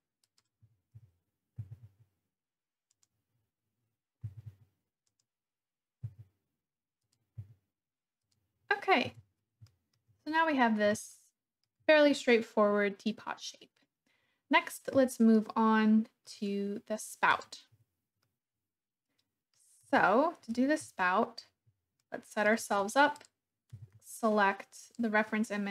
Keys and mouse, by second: 0.3 click, 0.3 i, 0.9 KP_1, 1.5 g, 1.8 z, 2.9 click, 4.3 g, 4.5 z, 5.1 click, 6.0 e, 7.0 click, 7.3 s, 8.3 click, 9.0 Tab, 9.6 shift+click, 11.1-11.6 shift+drag, 15.4-16.3 shift+middle drag, 17.4 click, 17.7 Tab, 18.2 click, 18.3 middle click, 18.7 click, 18.9 middle click, 19.9 Tab, 20.8 KP_1, 22.0-22.5 shift+drag, 23.7 g, 23.9 z, 24.9 click.